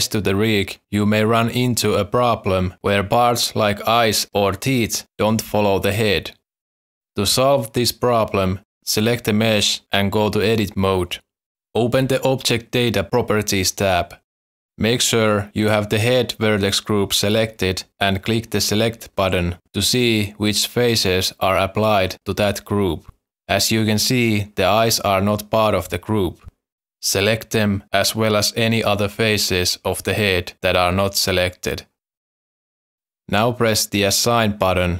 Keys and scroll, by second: 1.3 ctrl+p, 3.9 ctrl+p, 4.0 z, 7.0 ctrl+z, 10.6 Tab.